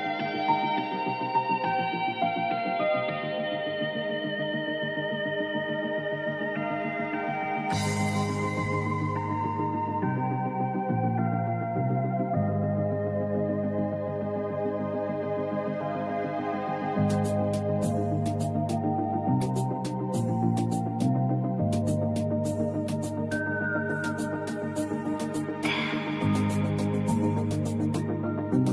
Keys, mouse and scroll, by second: 1.0 click, 2.3 alt+scroll down 1, 2.5 space, 2.6 click, 2.8 space, 3.2-5.5 drag, 7.9 click, 12.9 click, 14.3 click, 17.0 ctrl+2, 17.4 click, 19.2 right click, 19.8 click, 21.6-23.9 drag, 23.9 ctrl+2, 24.9-28.0 drag, 28.0 i.